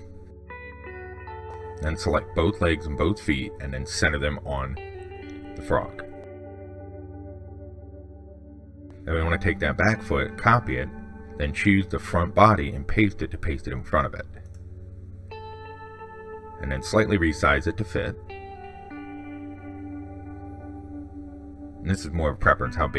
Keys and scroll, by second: 10.1 ctrl+c, 11.6 ctrl+v, 15.7 ctrl+z.